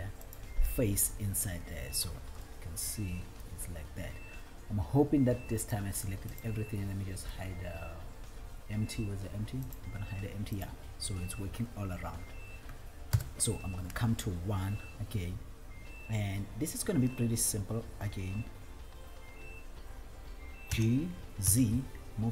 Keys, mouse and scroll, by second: 0.4 alt+click, 1.5 middle click, 2.8-3.9 middle drag, 5.8 click, 6.7 click, 9.8 click, 10.9 click, 13.4 KP_1, 14.6-15.1 scroll up 2, 15.5-16.9 scroll down 3, 20.8 g, 21.8 z.